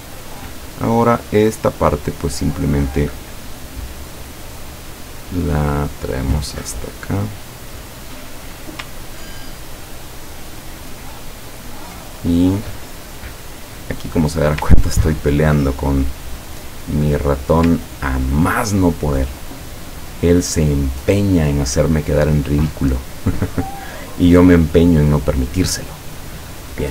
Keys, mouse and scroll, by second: 0.5 click, 3.9-7.1 drag, 9.2-9.8 ctrl+scroll down 2, 11.5 ctrl+click, 12.2 ctrl+scroll down 1, 12.7 click, 13.6-14.6 drag, 14.6-15.2 scroll down 3, 16.1 click, 16.4 click, 17.0 click, 17.4 click, 17.9 ctrl+scroll down 2, 26.4 click.